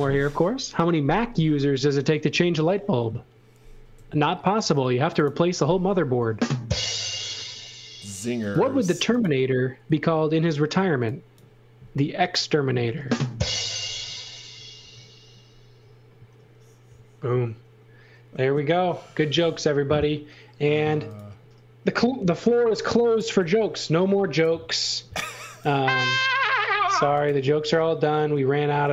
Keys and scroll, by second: 3.9 l, 10.6 e, 13.1 space, 19.4 l, 22.6 space, 23.4 l.